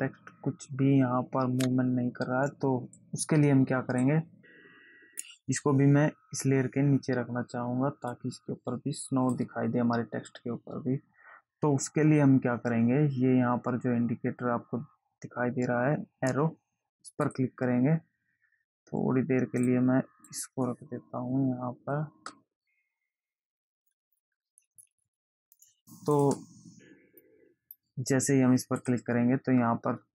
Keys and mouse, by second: 3.4 click, 8.5 click, 17.6 click, 20.0 click, 26.5 click, 27.4 click, 29.2 click.